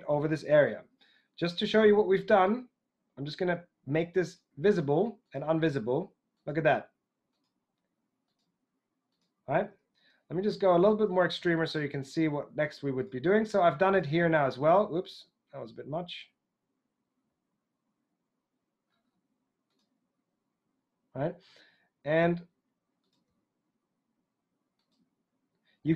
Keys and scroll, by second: 14.9 super+x.